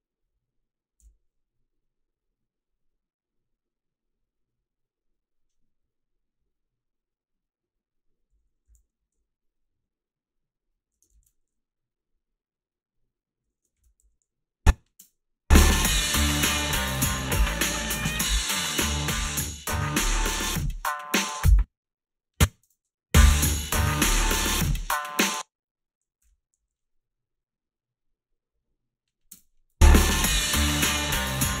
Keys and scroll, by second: 1.0 f, 8.7-9.6 typing, 11.2 ctrl+z, 13.8 ctrl+r, 13.8 z, 14.0 a, 15.0 space, 21.3 space, 22.7 space, 25.1 space, 26.2 h, 26.6 a, 29.3 space.